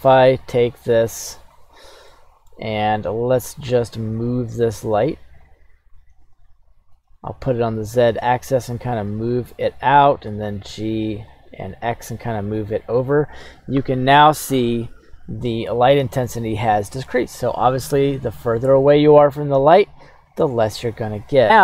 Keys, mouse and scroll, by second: 1.9 right click, 2.5 middle click, 3.3 right click, 5.0 g, 10.5 g.